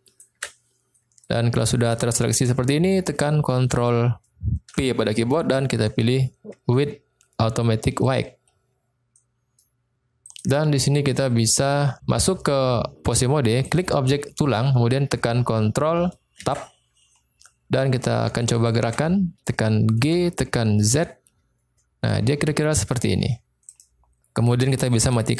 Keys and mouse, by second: 0.1 shift+click, 1.0 middle click, 2.0-2.4 shift+middle drag, 2.6 middle click, 4.6 ctrl+p, 9.2-9.6 middle drag, 10.3 click, 13.6 click, 16.4 ctrl+Tab, 17.4 middle click, 18.5 shift+middle click, 20.0 g, 20.9 z, 23.6 click.